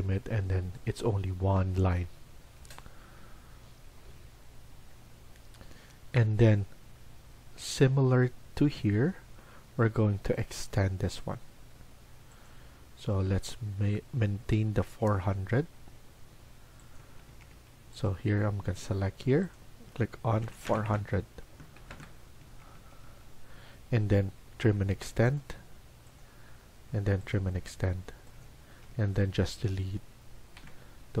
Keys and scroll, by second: 2.3 Escape, 2.6 Escape, 16.9 Escape, 17.2 Escape, 17.4 Escape, 20.3 typing, 21.8 Return, 22.3 Escape, 22.6 Escape, 23.0 Escape, 24.2-24.9 typing, 28.6 Escape, 28.9 Escape, 30.6 Delete.